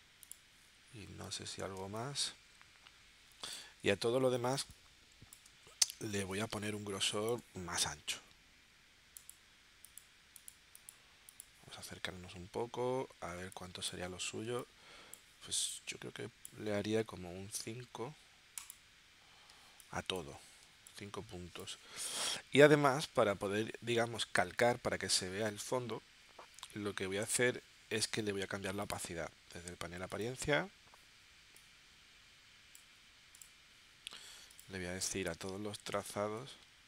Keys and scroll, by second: 1.8 space, 4.7 space, 6.1 space, 13.4 space, 14.5 space, 15.6 space, 19.5 space, 20.6 space, 35.8 3, 36.4 0.